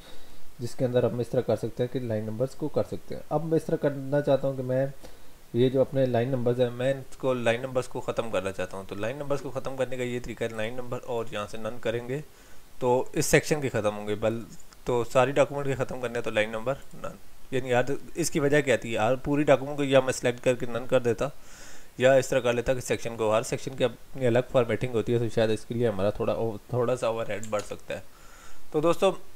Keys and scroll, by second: 27.6 alt+Tab.